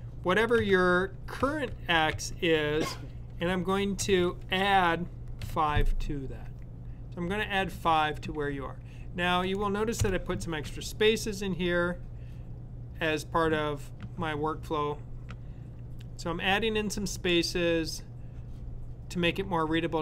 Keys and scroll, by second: 0.3-2.0 typing, 4.1-6.0 typing.